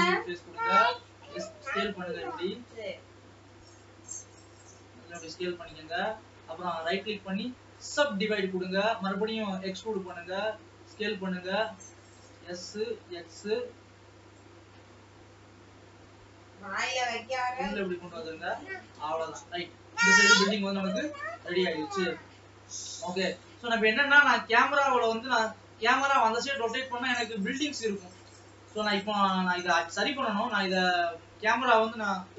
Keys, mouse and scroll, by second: 0.0-1.0 middle drag, 1.0 s, 6.7-10.2 right drag, 8.8 alt+e, 10.2 alt+e, 11.0 s, 12.3 s, 14.0 e, 18.5 middle click, 19.4 alt+a, 19.9-22.8 middle drag, 23.3-25.0 middle drag, 25.0 ctrl+s, 25.1 click, 25.6 r, 29.3 scroll down 2, 30.0-32.0 middle drag, 32.0 scroll down 2.